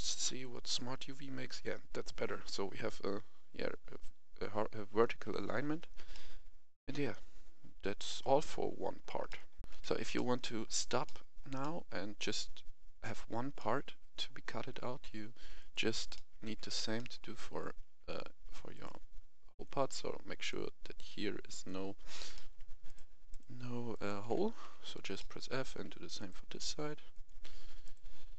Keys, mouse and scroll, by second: 6.0-9.2 middle drag, 9.6 F11, 9.7 F10, 10.1 middle click, 11.0 shift+middle click, 11.5-14.7 middle drag, 14.9 Tab, 15.5 right click, 16.1 middle click, 16.4 Tab, 16.9 middle click, 18.7 click, 19.5 right click, 20.3 shift+right click, 21.5 shift+right click, 22.3 middle click, 22.8 shift+right click, 23.2 shift+right click, 23.9 shift+right click, 24.6 shift+f, 25.1 middle click, 26.1 right click, 27.1 shift+right click, 27.8 shift+right click.